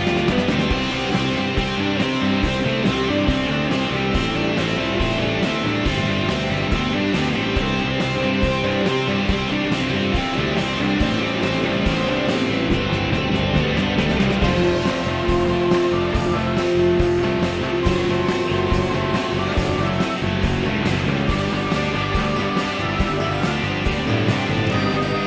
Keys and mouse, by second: 0.0-0.4 drag, 0.7 s, 3.5-3.9 drag, 3.5-3.9 right drag, 3.9-4.5 middle drag, 4.9 shift+middle click, 5.4 middle click, 6.0 s, 7.0-7.6 shift+middle drag, 7.9-8.3 middle drag, 8.3 s, 9.5 f, 10.1 z, 10.8 g, 12.4-13.7 drag, 12.4-13.7 right drag, 13.8-14.2 shift+drag, 13.8-14.2 shift+right drag, 17.0 shift+d, 21.1 shift+d, 23.8-24.5 middle drag, 24.7-25.2 shift+middle drag.